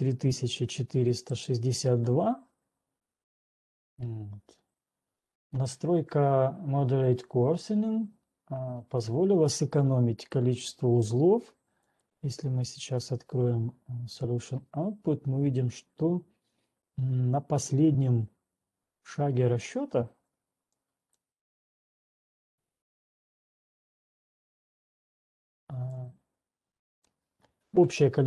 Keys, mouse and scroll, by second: 0.3 click, 1.7 right click, 2.1 right click, 6.3 click, 12.4 click, 13.8 click, 13.8-14.3 scroll down 10, 14.3-15.5 scroll up 9, 15.8-16.3 scroll, 16.3-17.3 scroll, 18.8-20.8 scroll, 20.8-21.3 scroll, 21.3 click, 25.0 ctrl+1, 25.3 click, 27.3 click.